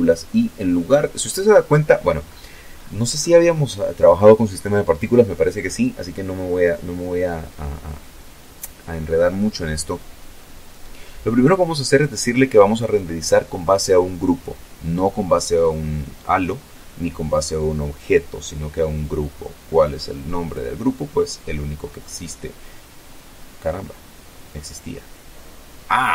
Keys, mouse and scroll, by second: 0.2-1.9 scroll up 3, 2.5-4.1 scroll down 3, 17.4 click, 18.8 click, 24.5 click.